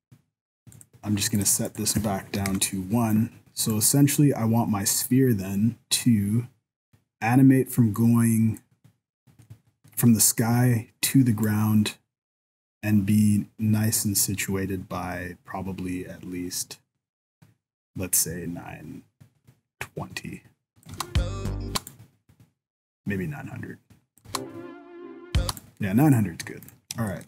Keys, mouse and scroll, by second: 0.8 click, 1.6 click, 3.7 click, 9.4 middle click, 11.4 click, 20.9 space, 21.7 space, 21.9 click, 24.2 space, 25.4 space, 25.6 click, 26.6 right click, 26.8 scroll down 2, 27.1 shift+middle click.